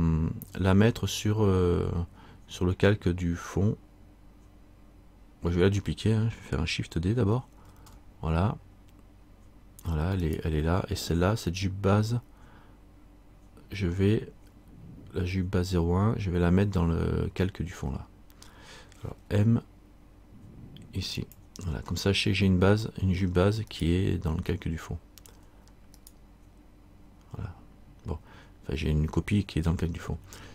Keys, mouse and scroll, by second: 7.8 shift+d, 23.9 right click.